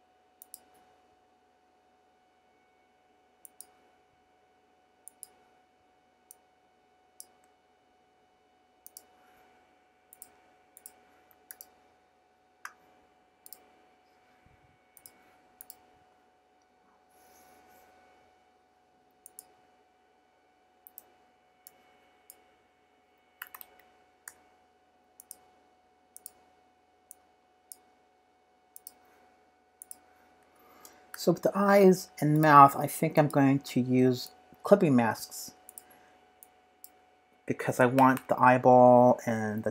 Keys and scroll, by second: 20.8 z, 23.4 super+-, 23.5 super+-, 24.2 p.